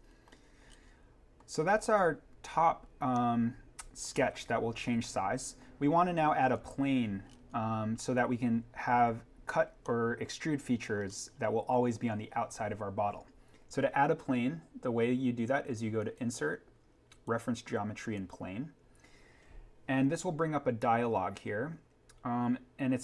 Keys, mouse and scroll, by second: 0.1 middle click, 0.7-1.5 scroll up 1, 3.1-4.8 middle drag, 4.8 scroll up 1, 9.8 scroll, 10.6 middle click, 11.3-13.3 scroll down 1, 15.9 click.